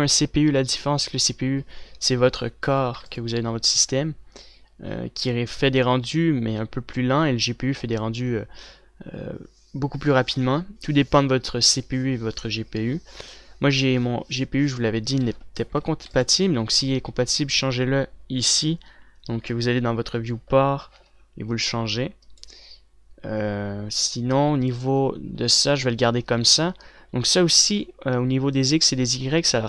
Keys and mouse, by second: 2.9 a, 3.2 a, 3.5 ctrl+s, 15.9 a, 16.2 a, 16.5 ctrl+s, 22.6-29.6 drag.